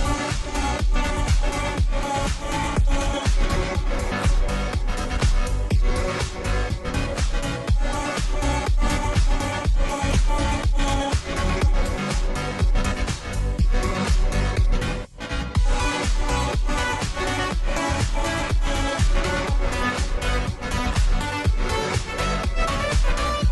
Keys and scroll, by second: 10.8 space, 12.2 space, 16.2 ctrl+t.